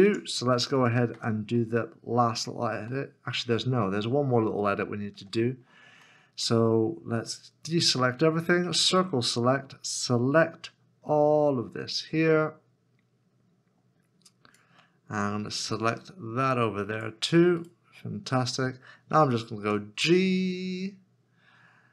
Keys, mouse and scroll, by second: 1.5 Tab, 1.7 middle click, 4.7 middle click, 5.3 shift+middle click, 6.3 shift+middle click, 8.7 c, 17.6 c, 17.7 right click, 19.6 g.